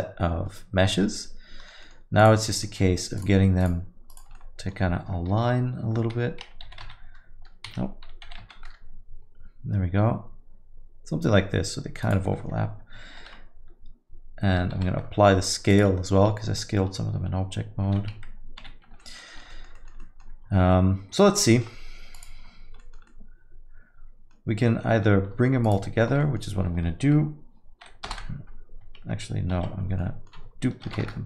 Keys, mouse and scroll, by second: 1.9 middle click, 2.2 click, 2.7 alt+middle click, 3.2 shift+click, 3.6 click, 4.3 shift+click, 4.4 alt+middle click, 5.3 f, 6.2 Escape, 6.7 g, 8.3 g, 13.4 ctrl+s, 14.8 ctrl+a, 18.1 ctrl+s, 18.6 z, 19.0 alt+middle click, 19.3 middle click, 19.5 alt+middle click, 19.7 middle click, 20.0 alt+middle click, 21.3 middle click, 21.5 alt+middle click, 22.1 click, 22.8 alt+middle click, 23.1 middle click, 25.6 shift+click, 26.2 middle click, 28.4 ctrl+j, 29.9 ctrl+z, 30.0 middle click, 31.0 shift+d.